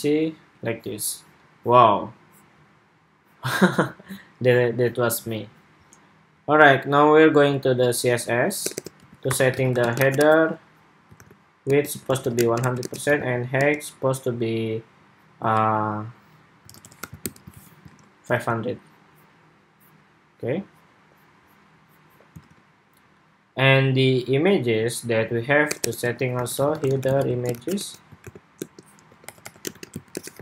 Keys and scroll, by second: 17.4 super+s, 17.6 super+Tab, 18.1 super+r, 22.2 super+Tab.